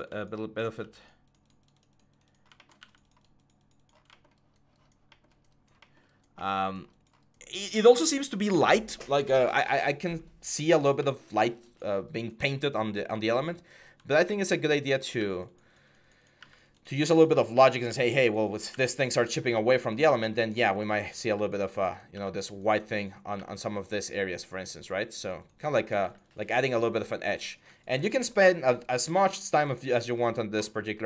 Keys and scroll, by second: 2.6 x, 15.0 x, 18.5 typing, 21.1 x, 25.8 x, 30.9 x.